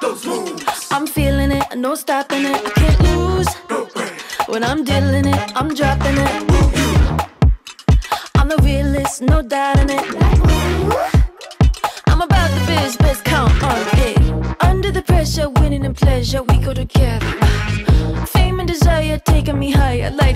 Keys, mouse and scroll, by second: 0.9 space, 6.6 click, 8.6 space, 18.3 space, 19.8 click, 20.2 click.